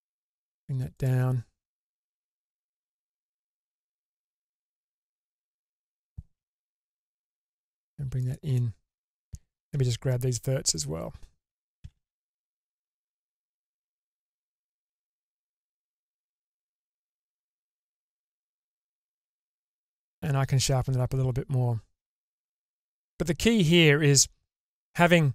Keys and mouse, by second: 4.0 click, 5.6 ctrl+click, 6.9 g, 8.6 middle click, 9.8 1, 10.8-11.8 drag, 11.8 g, 15.3 click, 15.9 g, 18.2 Tab, 19.7-24.2 middle drag.